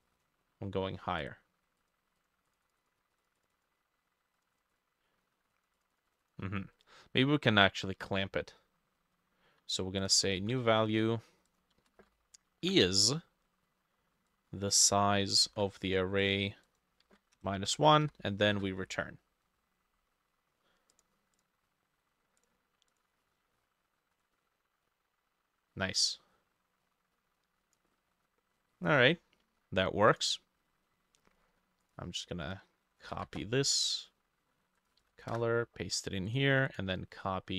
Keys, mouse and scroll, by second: 1.3-8.3 drag, 1.3 right click, 10.2 double click, 10.4 ctrl+c, 11.8 space, 12.0 ctrl+v, 12.7 =, 15.5 ctrl+c, 15.8 typing, 16.7 double click, 17.1 ctrl+v, 17.7-18.6 typing, 21.4 double click, 28.8 middle click, 33.2 ctrl+c, 33.4 typing, 33.7 Escape, 35.1 ctrl+v, 35.4 Return, 36.7 double click.